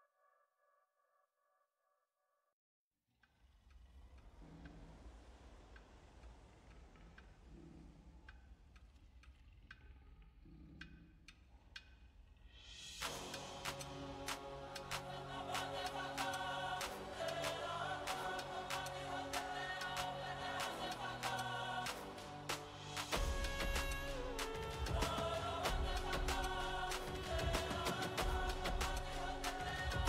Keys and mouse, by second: 1.5 z, 2.0 z, 3.5 z, 4.7 z, 6.7-10.7 drag, 7.7 v, 10.3 l, 10.7 l, 11.8 x, 15.7-23.5 drag, 24.7-30.0 drag.